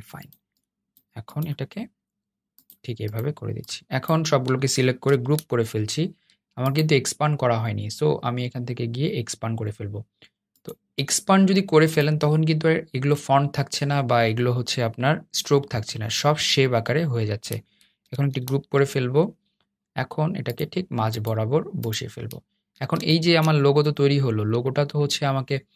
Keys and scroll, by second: 4.8 super+g, 17.8 super+g.